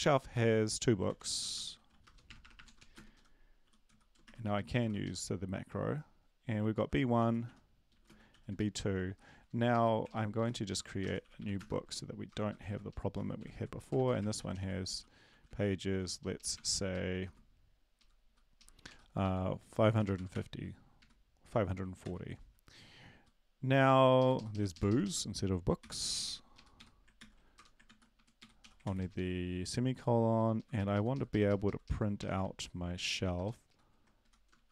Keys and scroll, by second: 0.0-0.3 typing, 0.2 Left, 1.8-5.3 typing, 8.0-9.0 typing, 9.0 Right, 9.3 Right, 9.5 Up, 9.7 Left, 10.3 ctrl+Right, 10.7 ctrl+shift+Left, 10.8-17.2 typing, 12.9 Left, 16.2 Left, 16.3 Left, 16.7 Right, 16.9 Right, 21.4 Right, 21.4 Delete, 22.0 ctrl+s, 24.3 Left, 24.7 Left, 24.9 Left, 25.0 Left, 26.2 Down, 26.2 Right, 26.2 k, 26.5 Up, 26.8 End, 27.2 ctrl+s, 27.5 Return, 27.8 ctrl+s, 28.1 Up, 28.4 End, 28.6 ;, 28.8 ctrl+s, 29.0 Down, 29.1 Down, 32.2 Left, 32.2 BackSpace, 32.3 BackSpace.